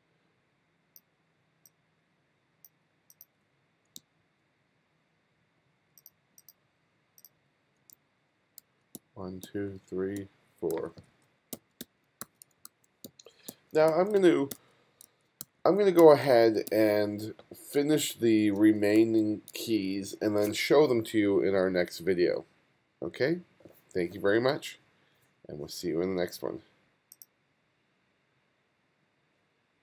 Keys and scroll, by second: 3.4-4.5 typing, 7.5 f, 8.0 g, 8.6 f, 9.0 g, 10.2-16.0 typing, 18.0 f, 19.0 f, 19.5 g, 20.0 g.